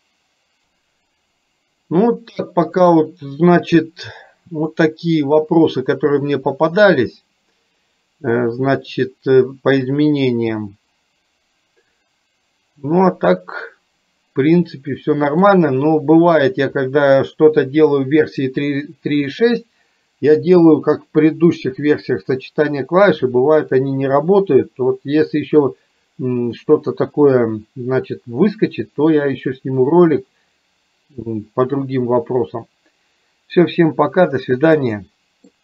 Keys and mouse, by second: 2.8-5.1 right drag, 6.6-8.3 middle drag, 13.1-15.4 middle drag, 34.9 middle click.